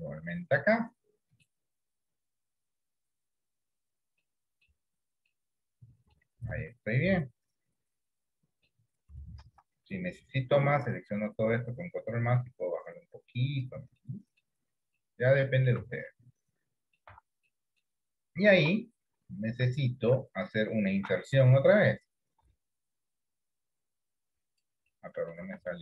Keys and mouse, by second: 0.5-1.5 middle drag, 2.3 KP_7, 4.6 shift+middle click, 5.7 middle click, 7.4-8.8 middle drag, 9.6 ctrl+KP_Add, 12.4-13.7 drag, 14.2 middle click, 15.2 middle click, 16.1 Tab, 16.2-17.2 middle drag, 17.4 Tab, 17.6 middle click, 18.8 KP_7, 20.1 shift+middle click, 25.0 middle click, 25.7 ctrl+z.